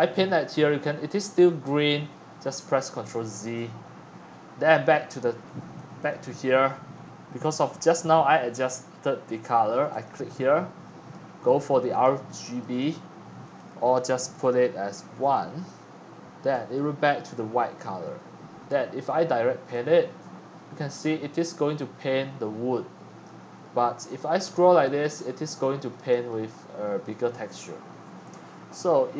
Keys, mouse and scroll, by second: 3.3 ctrl+z, 5.6 click, 6.6-8.7 scroll down 9, 6.8-8.7 middle drag, 8.7-10.0 scroll up 9, 10.0-13.1 drag, 13.5 click, 14.3 1, 15.3 click, 15.9 1, 16.5 middle click, 18.7 middle click, 23.2 click, 23.5-25.9 middle drag, 26.1 click, 26.3 click.